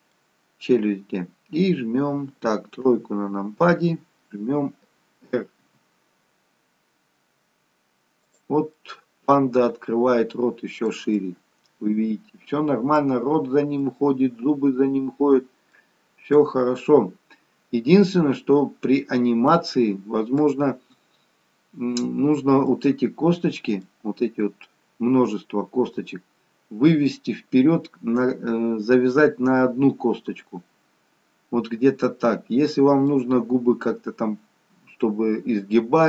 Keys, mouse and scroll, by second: 0.5-1.2 scroll up 2, 1.7-2.8 scroll down 1, 2.8 KP_3, 5.8 r, 8.8 middle click, 14.2 middle click, 17.9 middle click, 22.2-22.7 scroll down 1, 22.7 middle click, 32.4 middle click.